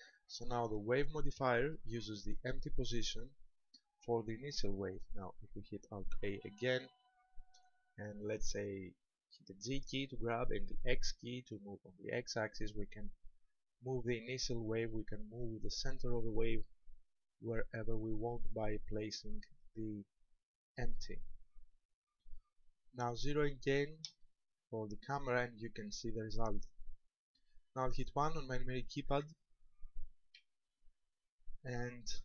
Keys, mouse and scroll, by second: 2.1 shift+middle click, 2.6 scroll up 2, 3.7 right click, 6.3 alt+a, 9.8 g, 20.8 ctrl+click, 24.2 KP_0, 29.2 KP_4, 29.2 KP_1, 30.5 KP_1.